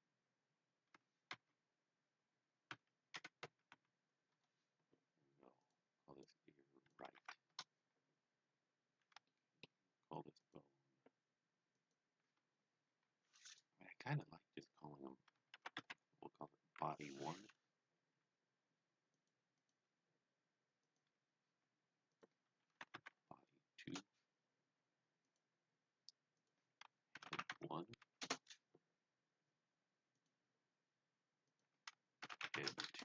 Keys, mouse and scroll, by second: 1.4 d, 3.0 KP_Subtract, 3.5 KP_1, 3.8 x, 4.3 Return, 5.6 click, 7.2 r, 7.5 Return, 9.0 scroll down 1, 9.3 shift+middle click, 10.4 click, 11.7 click, 15.2-16.3 typing, 15.3 click, 19.1 click, 19.6 click, 22.3-23.8 typing, 23.9 Return, 25.2 click, 26.4 click, 26.8-28.0 typing, 28.2 Return, 30.1 click, 31.4 click, 31.9-33.0 typing.